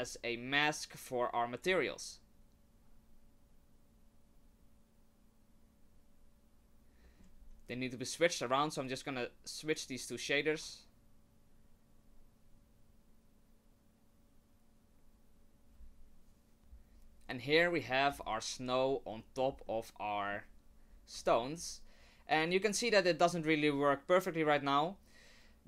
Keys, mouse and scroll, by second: 7.0 middle click, 7.4-8.8 scroll up 1, 8.8 click, 8.8-9.2 scroll up 1, 17.7 middle click, 18.1-19.0 scroll up 4, 19.2 middle click, 19.7 middle click, 20.9 scroll down 3, 21.3 shift+middle click, 25.0 scroll down 1.